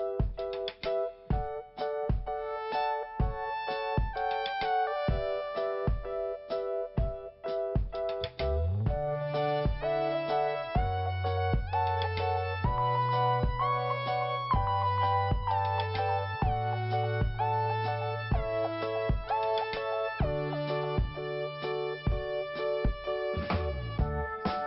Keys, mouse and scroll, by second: 0.0 click, 0.1 click, 0.3 click, 1.3 click, 5.7 click, 5.8 click, 6.5 click, 6.7 click, 7.6-8.1 scroll down 2, 8.4 click, 8.5 click, 10.1 click, 11.0 click, 13.5 scroll up 1, 15.6 scroll down 1, 17.1 click, 17.2 click, 18.9 click, 19.1 click, 20.2 click, 20.3 click, 22.6 click, 24.0 click.